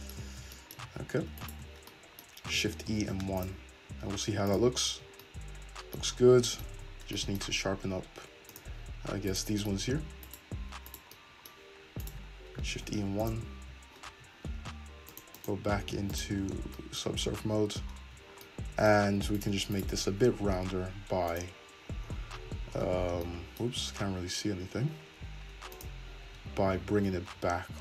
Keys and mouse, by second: 0.2 middle click, 0.8 middle click, 1.4 alt+shift+click, 2.9 shift+e, 4.5 click, 4.9 Tab, 5.7-8.9 drag, 6.8 Tab, 8.9 middle click, 9.3 right click, 9.4 middle click, 10.3 right click, 10.4 middle click, 10.9 right click, 11.0-12.0 middle drag, 12.0 shift+right click, 12.1-15.1 shift+middle drag, 12.7 shift+e, 13.6 Tab, 14.1 Tab, 15.1 click, 15.2 middle click, 15.4 click, 15.5 middle click, 16.1 click, 16.5 Tab, 17.1 Tab, 17.4 `, 18.0 Tab, 18.8 middle click, 19.4 click, 19.4 middle click, 19.8 click, 19.8-21.3 middle drag, 20.1 `, 21.3 click, 22.1 middle click, 22.4 Tab, 23.0 Tab, 23.7 Tab, 25.7 click, 26.3 Tab, 27.1 g.